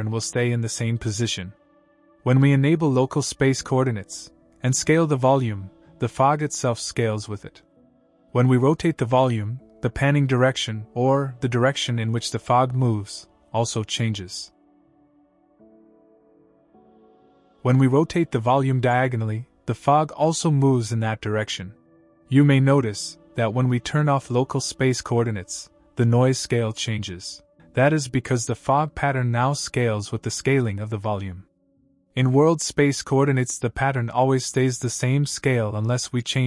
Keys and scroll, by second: 5.8 e.